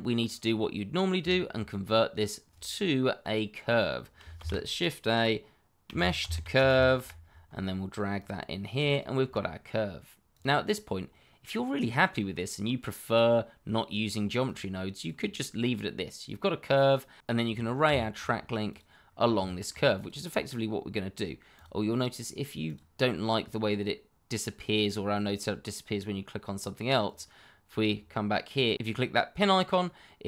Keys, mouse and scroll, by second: 0.4 click, 1.3 scroll up 1, 1.7 shift+middle click, 2.2 shift+middle click, 4.3 shift+a, 5.8-6.9 typing, 8.1 click, 10.9-12.9 scroll down 1, 14.4 click, 17.6 scroll up 1, 17.9 shift+middle click, 18.2-18.6 scroll up 1, 18.6 click, 19.1 scroll down 1, 19.9 click, 25.8-27.0 scroll up 1, 27.0 click, 27.9 scroll down 1, 29.8 click, 30.1-30.2 scroll down 1.